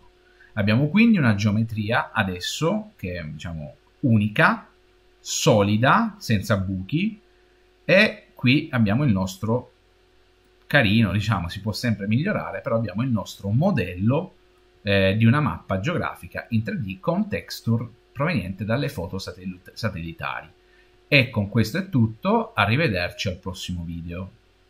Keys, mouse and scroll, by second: 0.0 Tab, 1.9 middle click, 2.5 middle click, 2.9-4.6 middle drag, 8.8-9.6 scroll up 6, 9.6-10.3 scroll down 4, 10.3-18.1 middle drag.